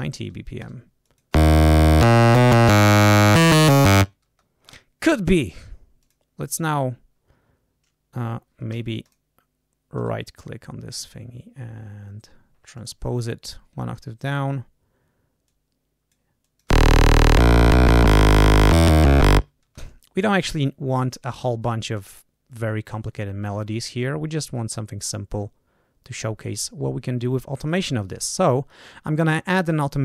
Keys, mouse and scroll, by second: 0.0-1.3 typing, 0.6 Return, 1.0 click, 4.2 space, 6.0 click, 8.7 g, 9.0 click, 9.9 right click, 12.7 click, 13.6 scroll down 1, 14.2 click, 15.4 click, 16.4 click, 16.6 space, 18.1 ctrl+scroll down 2, 19.6 ctrl+space, 21.9 click.